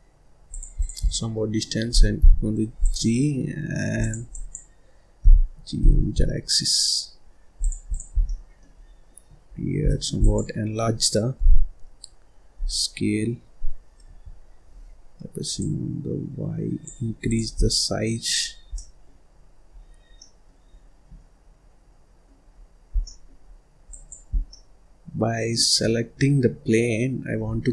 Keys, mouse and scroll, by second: 0.7 click, 1.0-2.1 middle drag, 2.1 g, 2.8 click, 3.9 click, 4.3 click, 5.2 g, 7.9 click, 8.1 scroll down 1, 8.2 middle click, 8.8-9.5 scroll up 4, 9.5-9.8 scroll down 1, 9.8 middle click, 10.2 click, 11.3 g, 15.5-17.3 drag, 17.5 scroll down 1, 17.7 middle click, 18.4 scroll down 3, 18.7 middle click, 19.2-20.0 scroll up 5, 20.0 scroll down 1, 20.1 middle click, 20.7-21.1 scroll up 2, 21.1-22.5 middle drag, 22.5-22.9 scroll up 1, 22.9 scroll down 1, 23.0 middle click, 23.4-23.9 scroll up 2, 23.9 click, 24.3 scroll down 2, 24.4-25.8 middle drag, 25.8-26.6 scroll down 1, 26.6-27.1 scroll up 2.